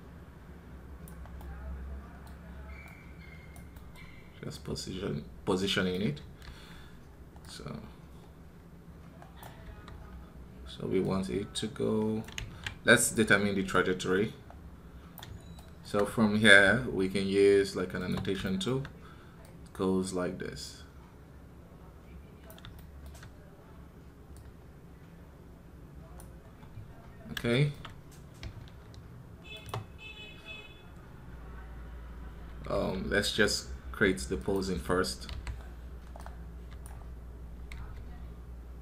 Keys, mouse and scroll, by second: 1.2-6.4 middle drag, 3.5 click, 6.4 typing, 9.3 click, 9.5 KP_3, 9.8 scroll down 3, 15.1 click, 15.4-17.9 shift+middle drag, 17.9 space, 18.2-26.3 shift+middle drag, 26.3 scroll down 2, 26.8 scroll up 2, 27.3-33.9 shift+middle drag, 36.4-38.2 drag.